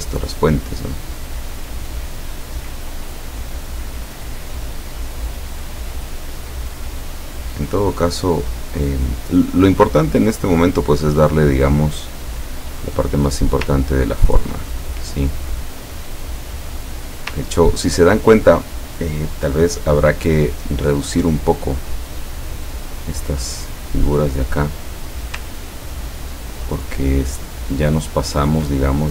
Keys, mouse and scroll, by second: 2.8 click, 6.0 click, 9.7 click, 10.8 click, 12.3 click, 13.1 click, 14.0-14.5 ctrl+scroll down 2, 14.8-17.0 ctrl+middle drag, 17.6 ctrl+scroll down 2, 20.5 click, 21.8-23.9 drag, 25.5-28.7 ctrl+drag.